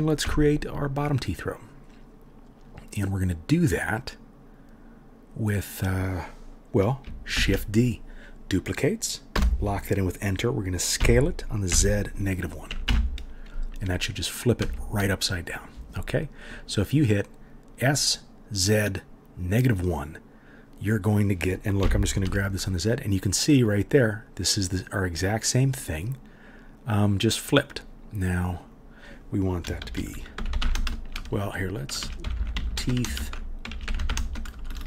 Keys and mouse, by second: 0.2 Tab, 7.4 shift+d, 11.0 s, 21.8 g, 32.3 e, 34.5-34.8 typing.